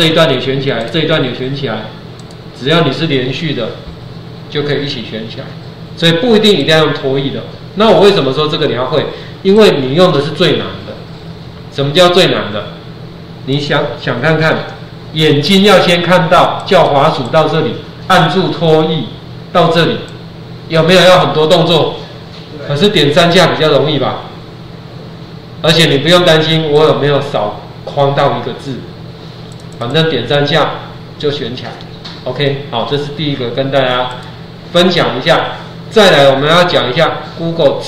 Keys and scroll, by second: 14.4 ctrl+0, 25.8 Escape.